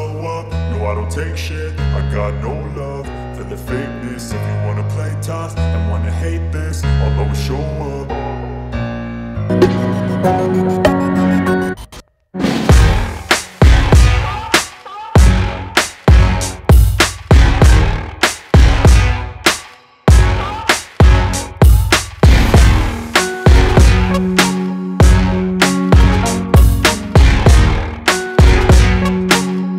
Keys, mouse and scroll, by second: 7.9-8.3 scroll down 1, 9.1 ctrl+t, 9.7-11.0 scroll down 1, 11.0-25.4 drag, 25.4 ctrl+t, 26.6-29.7 drag.